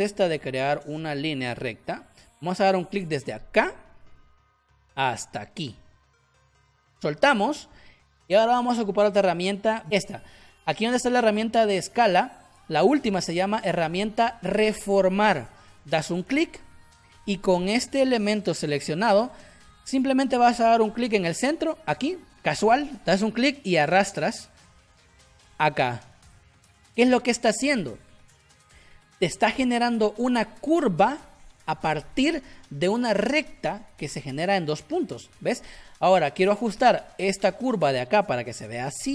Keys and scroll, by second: 36.9 space.